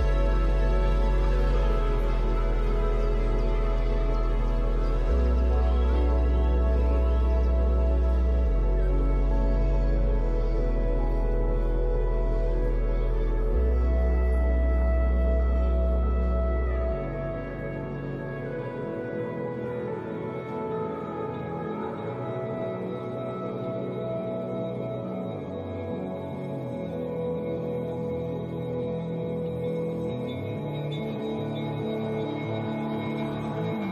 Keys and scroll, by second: 4.1 space.